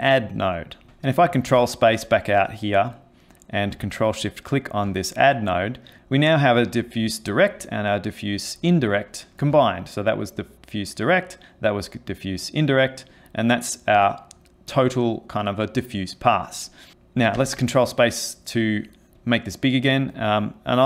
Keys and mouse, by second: 0.8 click, 1.5 ctrl+space, 4.2 ctrl+shift+click, 9.8 ctrl+shift+click, 11.5 ctrl+shift+click, 13.3 ctrl+shift+click, 17.4 ctrl+space, 18.0 middle click, 19.2 click.